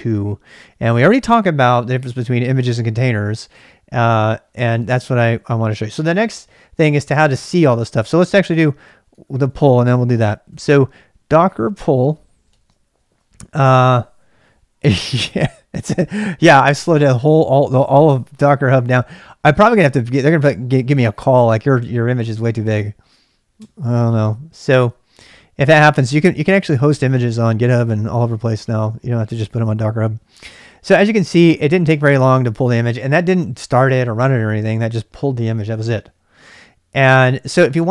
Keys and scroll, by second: 7.9-12.8 typing, 14.1 typing, 23.6 Return.